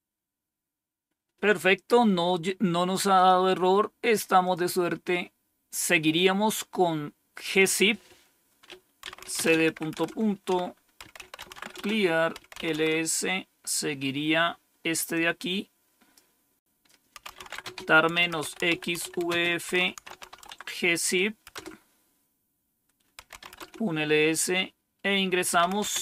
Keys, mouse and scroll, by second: 3.1 click, 4.3 click, 7.5 click, 8.7-13.0 typing, 15.0-16.1 drag, 16.9-21.4 typing, 22.9-23.8 typing, 25.2-26.0 typing.